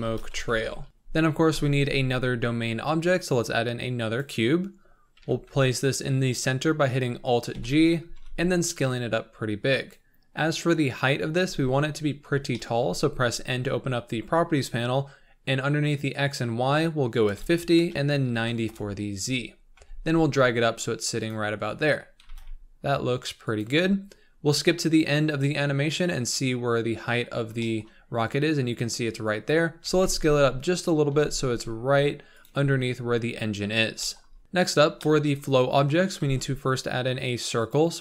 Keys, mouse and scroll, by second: 0.9 BackSpace, 4.2 shift+a, 5.2 KP_1, 6.2-7.5 scroll up 4, 7.5 alt+g, 8.0 scroll down 1, 8.1 s, 11.4 n, 12.5-17.9 shift+middle drag, 17.9-19.5 drag, 19.5 scroll down 5, 19.7 g, 21.5-21.9 scroll up 8, 22.2 g, 23.8 scroll down 5, 26.9 click, 26.9-27.6 scroll down 5, 27.6 shift+middle click, 27.9-29.9 scroll up 3, 29.9 s, 31.1 g, 34.0 shift+middle click, 34.3 scroll up 1, 34.4 click, 34.5-35.0 scroll down 4, 35.0 shift+middle click, 35.6-36.2 scroll up 2, 37.7 shift+a.